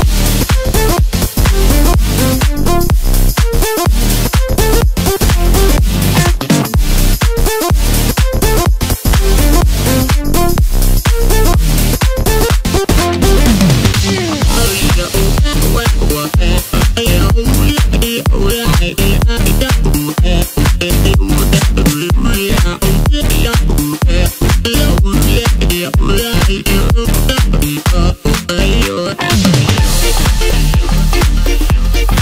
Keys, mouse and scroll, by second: 0.3-0.7 scroll down 1, 0.7 x, 2.9-4.7 middle drag, 4.7 Tab, 5.8 ctrl+2, 6.7 KP_7, 8.1 Tab, 10.3 drag, 11.3 click, 11.7-14.8 middle drag, 15.5 click, 15.6 click, 16.1-17.3 middle drag, 17.3 shift+g, 19.9 middle click, 20.7 ctrl+KP_Subtract, 22.1-24.8 middle drag, 24.8 click, 25.0 click, 25.4 middle click, 26.3 shift+click, 26.5 shift+click, 27.4 shift+click, 27.6 shift+click, 28.4 shift+click, 28.7 shift+click, 29.4 shift+click, 29.5 shift+click, 30.2 shift+click, 30.4 shift+click, 31.4 ctrl+KP_Add, 32.1 KP_7.